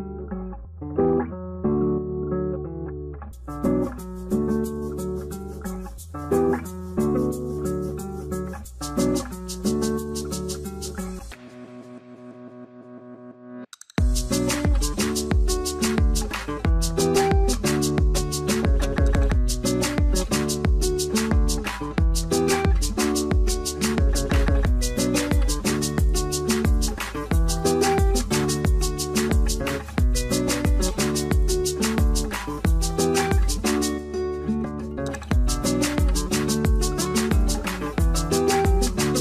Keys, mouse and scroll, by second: 15.6 5, 15.8 Return, 17.7 0, 17.9 Return, 19.7 3, 19.9 Return, 20.0 0, 21.9 3, 22.3 Return, 23.1-24.0 typing, 24.1 Return, 27.0 6, 27.9 Return, 30.4 4, 30.6 Return, 35.9 Return, 35.9 0, 36.1 double click.